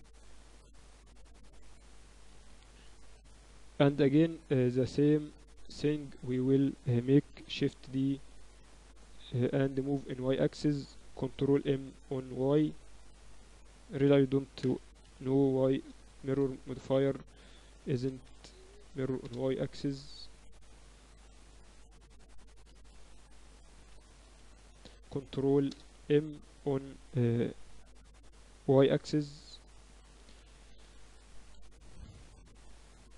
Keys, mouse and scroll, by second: 1.1 KP_3, 1.7 KP_1, 2.4 KP_3, 5.5-7.4 drag, 7.4 shift+d, 9.4 g, 11.7 y, 14.7 space, 16.4 BackSpace, 18.6 Down, 18.8 Down, 20.8 ctrl+z, 22.4 space, 24.7 Down, 24.9 Down, 25.2 Down, 30.2 Tab, 30.5 a, 30.9 a, 31.3 Tab, 32.0 ctrl+alt+shift+c.